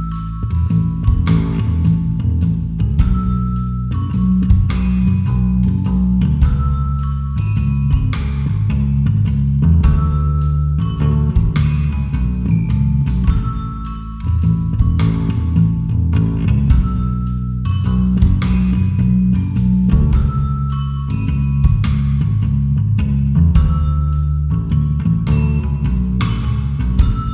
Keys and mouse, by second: 0.5 s, 4.2 g, 7.5 shift+click, 8.6 Tab, 10.9-12.6 drag, 13.6-14.9 drag, 16.5 click, 19.7-21.8 drag, 22.7 Tab, 23.9 2, 26.7 Delete.